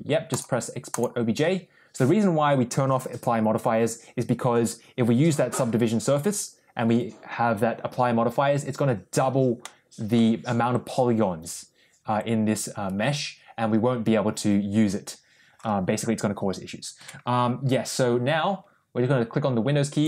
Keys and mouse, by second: 9.5 middle click, 10.6 Tab, 12.0 Tab.